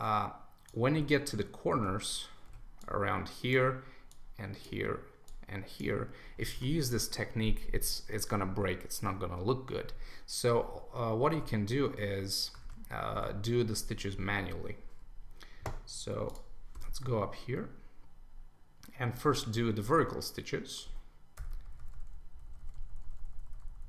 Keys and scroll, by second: 6.5 super+d, 12.6 super+1.